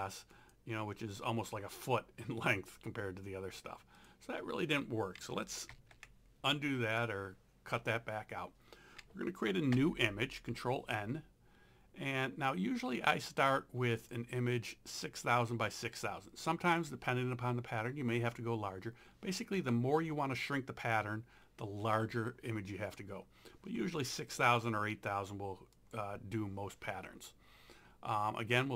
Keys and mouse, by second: 0.3 click, 4.0 click, 5.3 ctrl+a, 5.7 ctrl+x, 9.8 ctrl+n, 14.0 click, 25.8 click, 28.3 click.